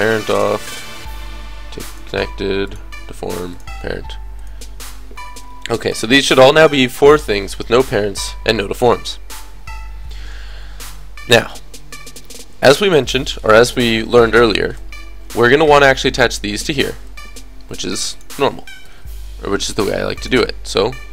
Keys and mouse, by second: 1.4 click, 5.3-9.7 drag, 12.8 middle click, 15.7-20.1 drag, 18.1 right click.